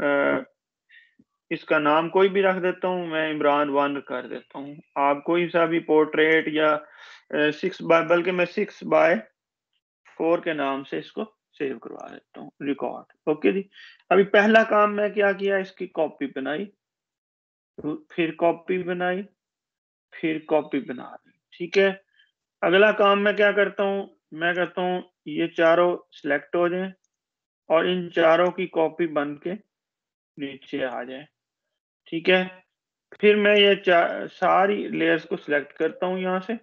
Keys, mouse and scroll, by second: 0.0-1.0 typing, 2.5-6.3 typing, 7.4 BackSpace, 9.4 x, 13.0 click, 24.3-33.9 drag.